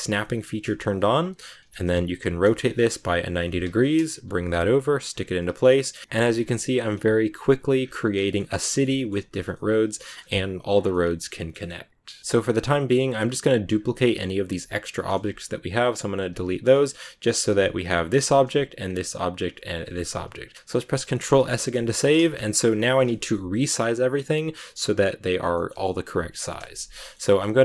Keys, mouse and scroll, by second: 1.0 h, 1.7 ctrl+z, 2.1 r, 5.6 right click, 6.0 middle click, 6.1 KP_7, 6.9 shift+d, 7.7 a, 7.7 scroll down 2, 7.8-9.3 middle drag, 8.5 scroll up 1, 9.3 scroll down 1, 9.4-10.7 middle drag, 10.7 scroll down 2, 10.8 middle click, 11.4 scroll up 1, 11.6-12.9 middle drag, 12.9 right click, 13.4 x, 14.0 right click, 14.7 shift+right click, 15.1 x, 15.7 right click, 16.1 x, 16.6 right click, 17.4 x, 17.8 right click, 17.9 g, 18.6 shift+right click, 18.8 g, 19.6 shift+right click, 19.8 g, 21.1 ctrl+s, 21.4 shift+middle click, 22.3-22.9 scroll up 3, 22.3 middle click, 22.9 scroll down 1, 23.0-25.3 shift+middle drag, 25.3 scroll down 1, 25.4 middle click, 26.1 KP_7, 26.9-27.6 shift+middle drag.